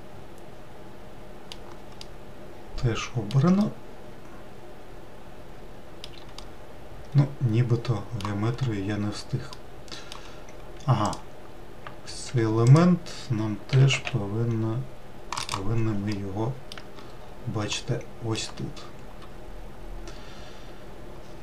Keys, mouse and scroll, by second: 2.7-9.3 middle drag, 9.3-10.2 scroll up 1, 10.2-11.7 middle drag, 11.7 click, 13.0 1, 13.3 click, 14.4 g, 16.1 click, 16.7 scroll up 1, 16.8-17.8 middle drag, 17.8-18.3 scroll down 3, 18.4 alt+middle click.